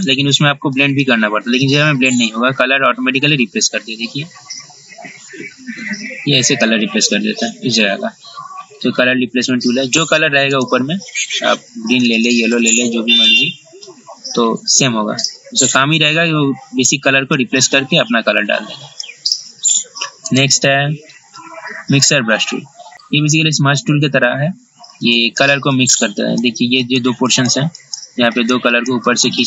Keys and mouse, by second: 20.4 right click, 22.1-29.4 drag.